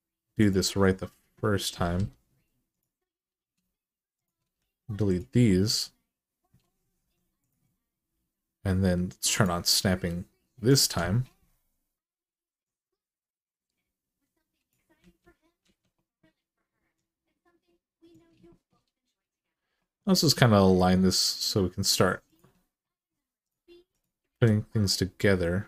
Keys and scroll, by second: 1.7 3, 4.3 x, 6.8 1, 14.8 alt+z, 15.4 alt+z, 20.0 g, 24.1 g.